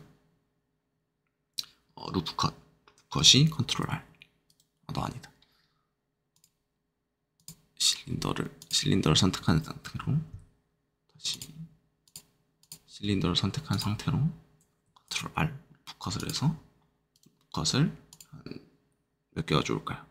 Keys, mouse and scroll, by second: 3.7 ctrl+r, 4.4 right click, 5.6-6.1 scroll down 1, 6.3 click, 7.3 click, 8.0-8.5 scroll down 2, 8.5 click, 11.3 click, 12.0 click, 15.1 ctrl+r, 16.1 click, 17.1 right click, 18.1-20.1 drag.